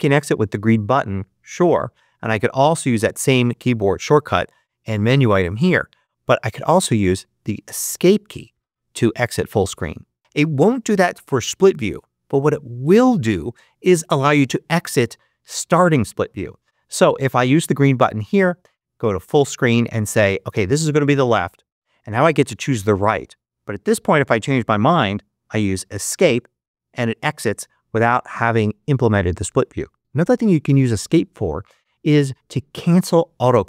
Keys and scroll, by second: 7.7 Escape.